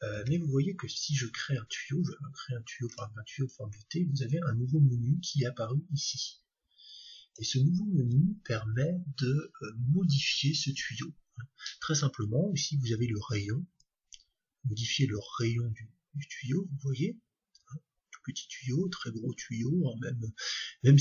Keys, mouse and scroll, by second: 0.2 shift+a, 6.0-7.9 drag, 13.8-15.6 drag.